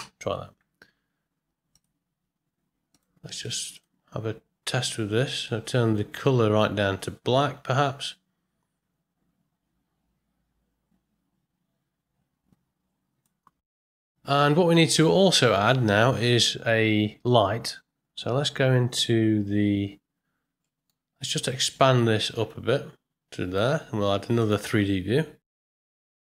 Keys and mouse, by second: 19.7 right click.